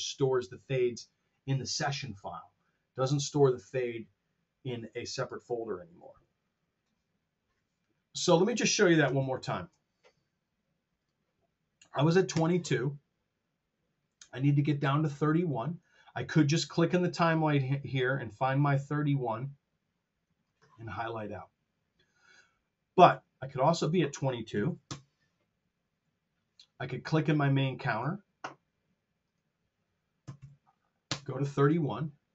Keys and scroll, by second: 9.1 super+z, 11.9 KP_2, 12.2 ctrl+space, 24.5 KP_2, 24.8 Return, 30.2 KP_3, 31.0 space.